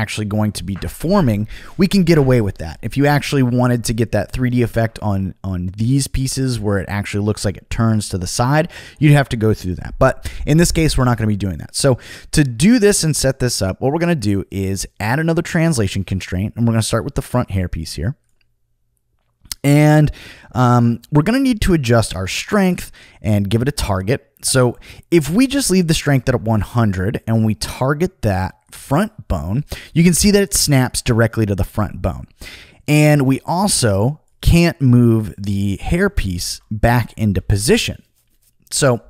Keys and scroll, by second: 36.4 super+z, 37.3 super+z.